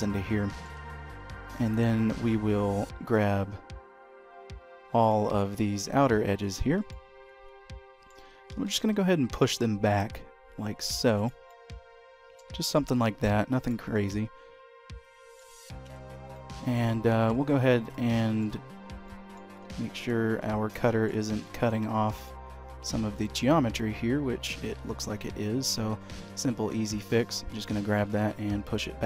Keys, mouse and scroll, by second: 1.3 click, 2.9 ctrl+click, 4.8 ctrl+click, 6.2 ctrl+click, 6.7 middle click, 8.3 g, 11.3 middle click, 12.4 shift+middle click, 12.8 middle click, 13.8 middle click, 15.7 Tab, 16.2 middle click, 17.2 h, 17.6 click, 18.0 middle click, 18.9 middle click, 19.5 ctrl+z, 20.1 ctrl+z, 20.5 middle click, 21.1 shift+middle click, 21.4 middle click, 22.7 Tab, 23.0 middle click, 25.9 2, 26.7 click, 27.7 g, 28.9 Tab.